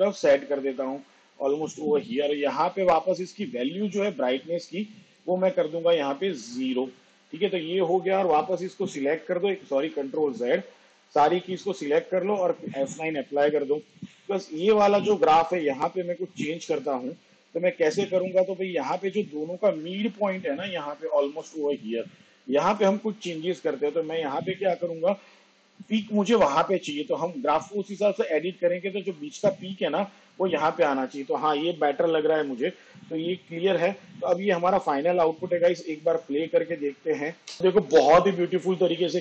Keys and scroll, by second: 10.5 ctrl+z, 13.5 F9.